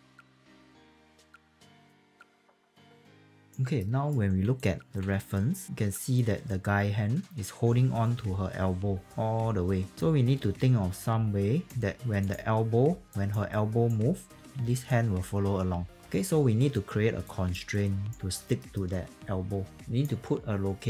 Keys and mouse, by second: 0.7 alt+click, 0.8 alt+right click, 1.0 q, 1.0 alt+click, 1.3 w, 1.3 alt+click, 2.1 click, 2.3 f, 3.0 click, 3.4 alt+click, 3.8 alt+middle click, 4.5 alt+click, 7.2 click, 13.0 alt+click, 13.5 alt+right click, 14.3 w, 14.8 click, 17.2 alt+click, 17.7 alt+right click, 18.5 alt+middle click, 19.7 alt+click.